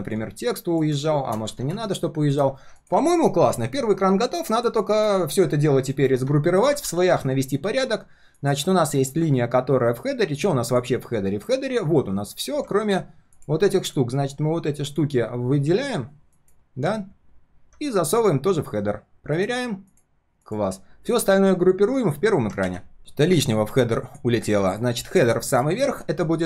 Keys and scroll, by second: 1.5 ctrl+z, 6.0 alt+l, 6.9 ctrl+s, 22.6 ctrl+s, 25.4 ctrl+shift+].